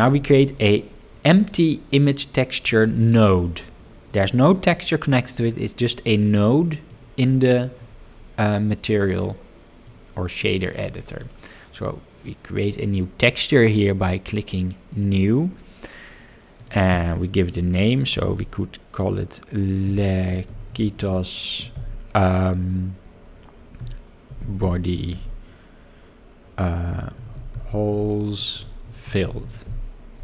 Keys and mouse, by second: 0.1-2.8 drag, 5.9-7.1 drag, 9.1 click, 14.9-30.2 drag, 29.3 l.